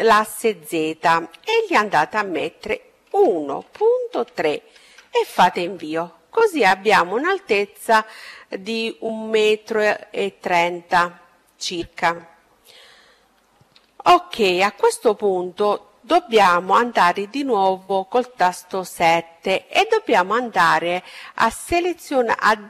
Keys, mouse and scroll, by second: 12.0-13.8 middle drag, 16.0 KP_7, 18.9-20.7 middle drag.